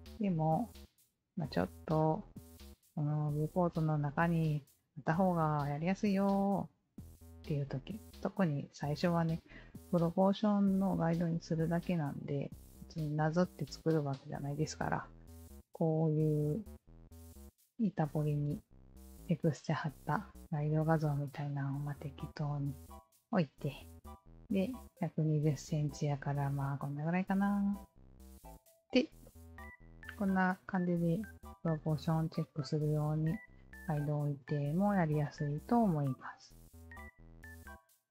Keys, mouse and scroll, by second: 2.4-2.8 alt+drag, 3.0-6.8 alt+drag, 7.4 alt+click, 12.7 alt+click, 14.1-16.9 alt+drag, 17.2 alt+click, 18.2-19.5 alt+drag, 20.0 alt+click, 21.3-22.5 alt+drag, 22.8-24.1 alt+drag, 28.2 alt+click, 28.5 ctrl+z, 29.3-35.8 alt+drag, 37.8 alt+click.